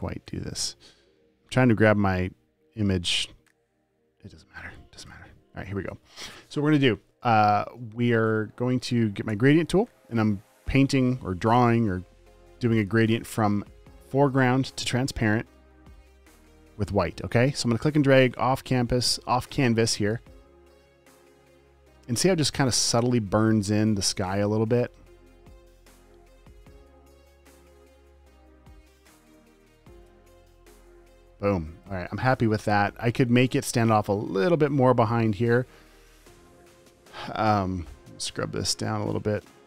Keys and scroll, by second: 9.6 g, 24.8 super+z, 29.7 space, 30.1 v.